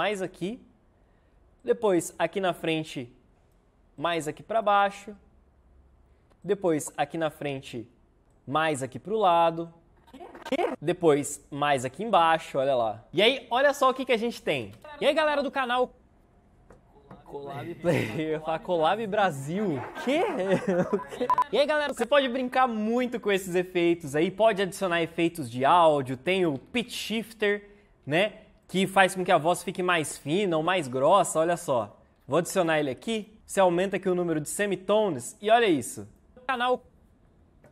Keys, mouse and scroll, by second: 9.9 Right, 14.7 space, 21.8 space, 26.0-27.2 typing, 36.5 space.